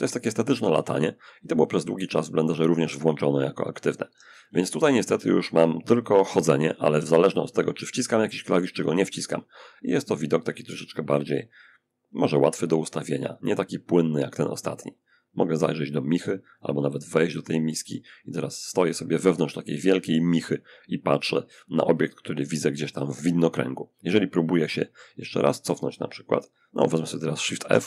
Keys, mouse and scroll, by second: 2.2 middle click, 3.4 d, 3.6 d, 7.4-8.4 typing, 15.4 w, 15.7 w, 15.8 w, 20.7 click, 25.3 click, 27.0 shift+f, 27.4-27.8 shift+scroll up 1.